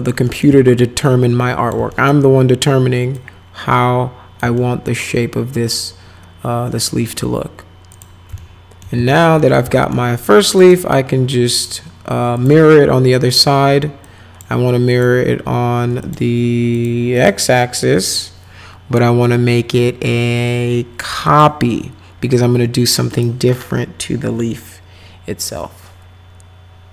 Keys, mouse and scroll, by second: 0.3 right click, 1.0 click, 1.9 alt+right click, 3.1-4.4 drag, 4.5-7.2 alt+right drag, 7.9 click, 8.4 alt+middle click, 9.0 z, 9.4 middle click, 9.8 alt+middle click, 10.2 click, 10.6 click, 12.4 click, 14.0 click, 14.9 click, 16.0 click, 16.7 click, 17.2 click, 21.3 click, 23.1 click.